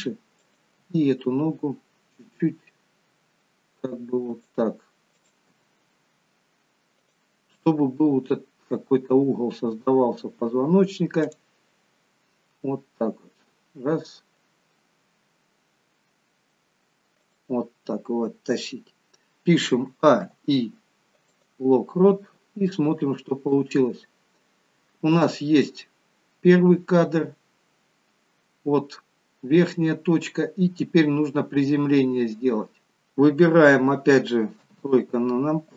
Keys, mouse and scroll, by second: 0.5 click, 0.8 g, 5.2 click, 5.8 g, 11.3 click, 12.7 g, 20.0 a, 20.4 i, 22.9 click, 24.0-24.5 scroll down 2, 25.8 scroll down 1, 26.1 click, 34.7 KP_3.